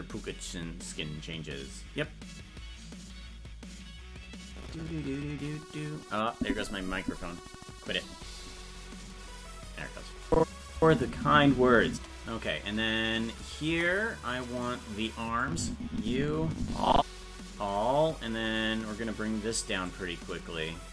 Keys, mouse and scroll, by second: 10.3 click, 10.7 space, 12.5 space, 13.7 KP_0, 14.6 right click, 15.4-17.7 drag, 19.9-20.9 drag.